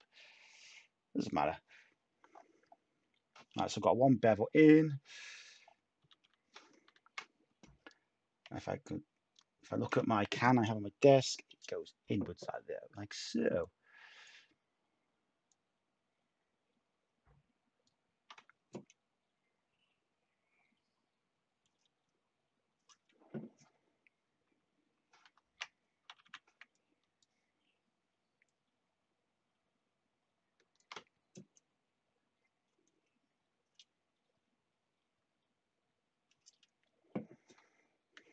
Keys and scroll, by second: 6.0 typing, 26.1 typing.